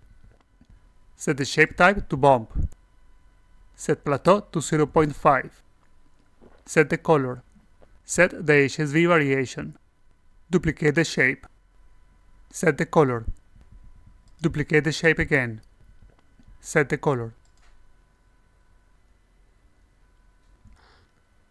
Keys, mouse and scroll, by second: 0.5 click, 0.6 a, 1.5 click, 2.0 click, 3.2 click, 6.8 click, 8.4 click, 10.7 click, 12.7 click, 14.9 click, 16.9 click, 17.1 ctrl+v, 18.9-20.3 alt+drag, 20.6 click.